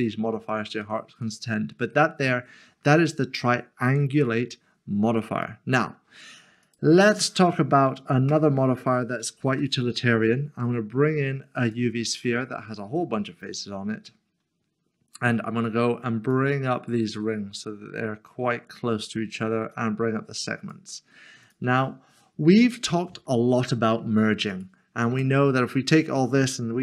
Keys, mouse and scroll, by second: 5.4 middle click, 6.7 click, 8.3 Delete, 9.4 a, 11.7 click, 12.2 click, 12.4 middle click, 13.6 scroll up 1, 15.2 click, 19.7 click, 22.2 click, 22.4 middle click, 24.6 click.